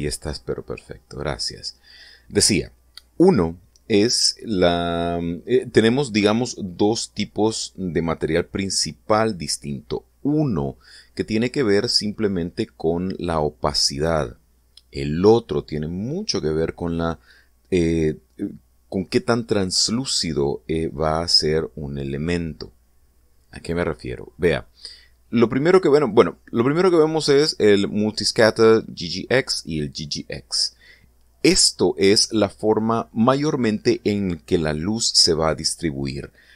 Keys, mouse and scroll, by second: 26.7 click, 32.8 click.